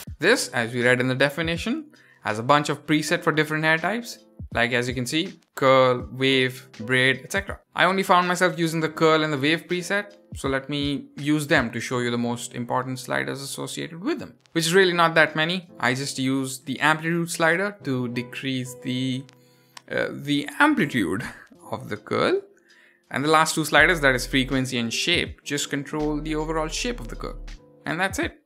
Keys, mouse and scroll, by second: 0.0 scroll down 4, 0.5 click, 2.5-13.0 drag, 13.9-14.5 scroll down 1, 15.4-21.0 drag, 22.9-25.5 drag, 25.7-27.8 drag, 27.9 click.